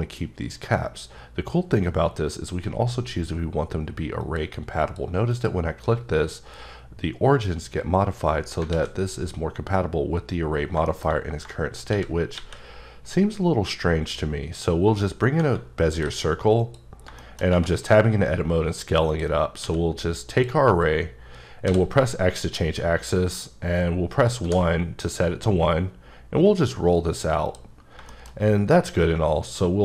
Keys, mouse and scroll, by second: 4.2 click, 4.8 click, 5.3 click, 8.6 click, 8.8 a, 10.6 scroll down 2, 10.9 shift+middle click, 11.2 scroll up 2, 11.9 c, 12.4 a, 14.2 click, 15.2-15.7 scroll down 5, 16.2 s, 16.6 click, 17.0 scroll down 1, 17.2 shift+middle click, 17.7 scroll up 2, 19.1 click, 19.6 q, 20.3 click, 21.7 x, 24.4 1, 25.2-25.5 scroll up 5, 26.0-26.6 scroll up 6, 27.1 scroll up 2, 27.5 click, 27.8 scroll down 3, 28.1 shift+middle click, 28.4-29.1 scroll up 6.